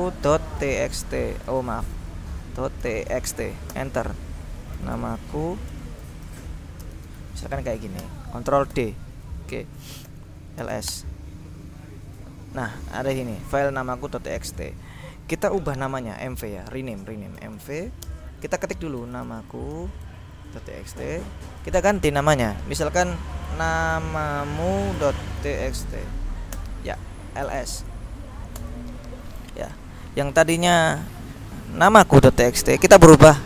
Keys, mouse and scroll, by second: 0.0-1.6 typing, 2.7-7.6 typing, 8.1 Return, 8.9 ctrl+d, 10.2 ctrl+l, 10.8 s, 11.0 Return, 12.9 click, 14.6 click, 17.3-20.3 typing, 23.3-28.2 typing, 26.6 Return, 28.7 Return, 29.7-30.4 scroll down 2, 31.2-33.1 drag.